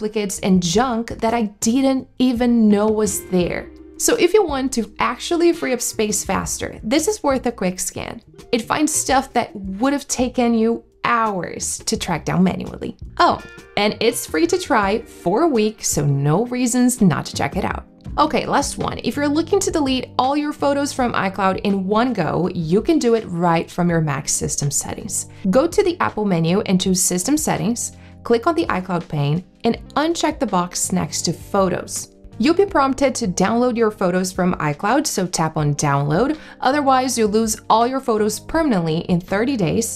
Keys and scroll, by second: 27.0 super+q, 27.5 shift+super+q.